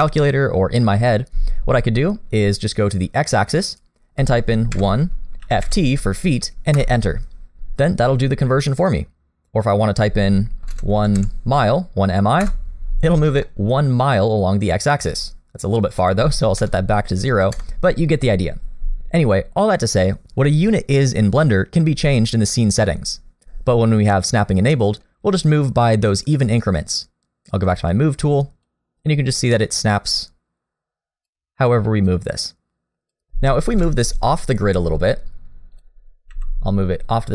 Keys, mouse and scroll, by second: 3.7 click, 9.6 click, 13.1-13.8 scroll down 2, 13.5 middle click, 16.0 click, 24.7 middle click, 25.2-27.7 scroll up 1, 27.7 click, 28.6 click, 32.1 click, 33.8 KP_7, 34.5 scroll up 1, 35.7 click, 36.3 g.